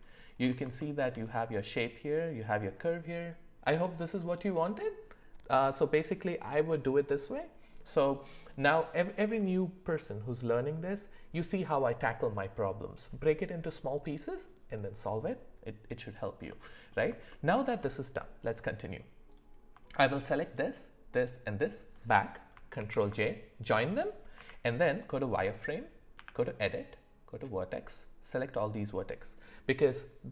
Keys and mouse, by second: 0.8 shift+middle click, 16.5 middle click, 17.3 shift+middle click, 19.3 click, 22.8 ctrl+j, 24.4 z, 26.2 Tab, 27.3 click, 28.0 click.